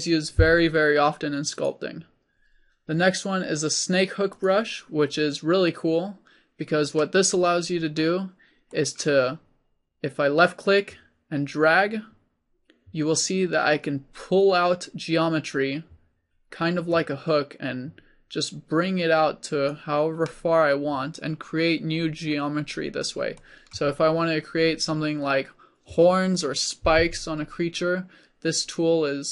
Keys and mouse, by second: 10.5-20.2 drag, 22.2 click, 22.9-29.3 middle drag.